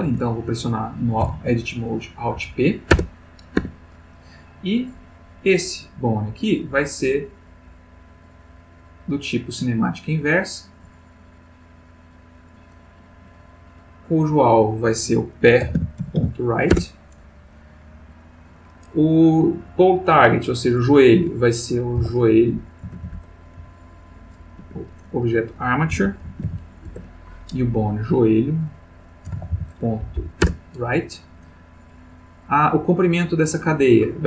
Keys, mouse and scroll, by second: 0.1 Tab, 1.2 alt+p, 2.4 Down, 2.9 Return, 3.6 Tab, 4.7 click, 7.1 click, 9.1 click, 10.6 click, 12.1 click, 14.3 click, 15.6 p, 15.7 e, 16.0 ., 16.1 r, 16.7 Return, 18.1 click, 21.9 j, 21.9 o, 22.8 BackSpace, 23.6 j, 24.6 Escape, 26.0 click, 26.2 a, 26.4 r, 26.8 Return, 28.4 click, 29.2 j, 29.3 o, 29.5 e, 30.0 Down, 30.4 Return.